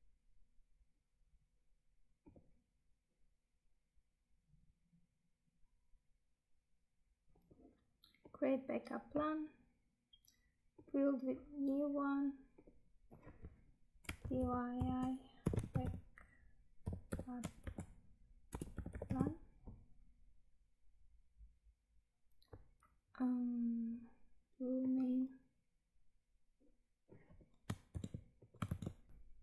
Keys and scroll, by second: 27.8 ctrl+c, 28.6 ctrl+v, 29.1 Tab.